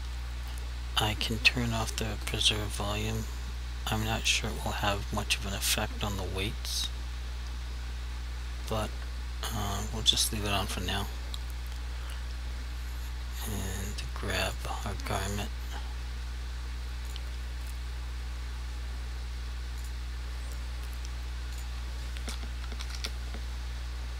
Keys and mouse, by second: 1.9 click, 14.5 click, 22.6 s, 22.9 g.